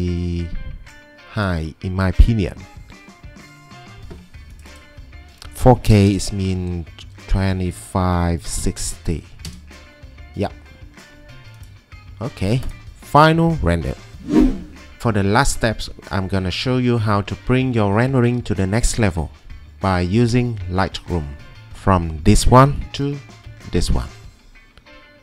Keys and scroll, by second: 5.8-6.1 typing, 8.2-9.4 typing, 12.8-13.5 typing, 23.0 alt+Tab.